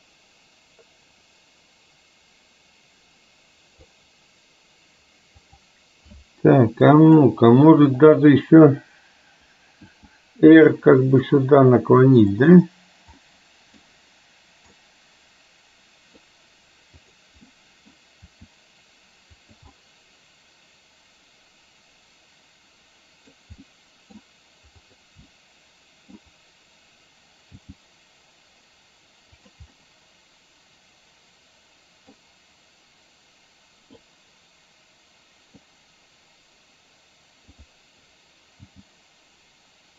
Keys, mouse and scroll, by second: 7.1 click, 8.1 click, 9.9 r, 13.3-13.9 middle drag, 14.8-16.3 middle drag, 17.1 click, 17.5-18.0 middle drag, 18.3 r, 19.9-23.5 middle drag, 23.8-24.1 middle drag, 24.9 click, 25.3-26.3 middle drag, 27.6 g, 29.8-32.1 middle drag, 34.1-35.8 middle drag, 37.6 click.